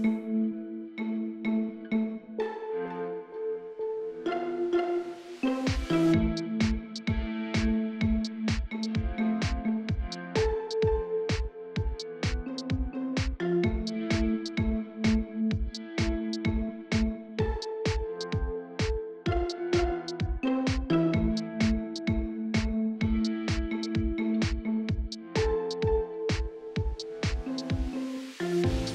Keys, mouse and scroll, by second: 2.8 shift+click, 3.3 shift+middle click, 3.8 e, 4.2 click, 4.8 r, 6.2 click, 7.0 s, 7.5 click, 8.5 e, 8.9 click, 9.7 r, 10.9 click, 11.5 r, 12.7 click, 13.5 scroll down 2, 13.8 KP_1, 14.1 scroll up 2, 14.3 shift+middle click, 14.7 alt+click, 14.9 scroll down 3, 15.0-16.1 middle drag, 16.1 click, 16.6 middle click, 16.9-18.4 alt+drag, 18.4 middle click, 19.0 middle click, 19.3 click, 19.9 middle click, 20.5 click, 20.7 middle click, 21.3 middle click, 21.5 click, 21.8 middle click, 22.3-22.6 scroll up 1, 22.6 KP_3, 23.0 scroll up 1, 23.1 shift+middle click, 23.5 click, 24.3 scroll down 2, 24.5 shift+middle click, 24.5 scroll up 2, 25.0 e, 25.5 click, 27.0 s, 27.8 click, 28.4 r.